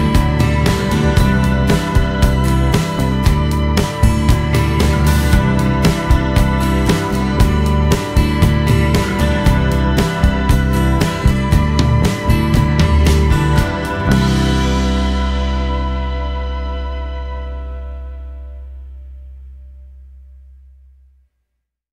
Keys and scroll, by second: 3.7 Escape, 6.2 F8, 6.4 z.